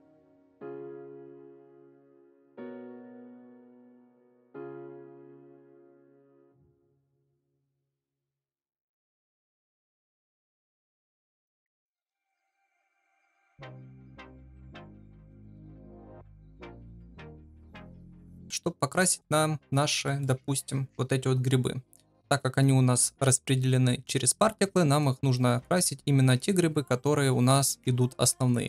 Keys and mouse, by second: 0.1 KP_3, 0.6 shift+middle click, 0.9 Tab, 1.0 shift+middle click, 1.3 3, 1.4 click, 1.8 Tab, 2.1 click, 3.0 Tab, 3.3 3, 3.4 click, 5.8 alt+shift+click, 11.3 click, 12.1 ctrl+z, 12.7 click, 13.0 click, 14.1 click, 14.5 KP_Divide, 15.1-15.4 middle drag, 15.7 ctrl+s, 16.0 KP_0, 16.6 middle click, 16.9 shift+middle click, 18.1 middle click, 18.4-18.9 shift+middle drag, 18.9 shift+middle drag, 20.0 middle click, 24.7 shift+middle drag.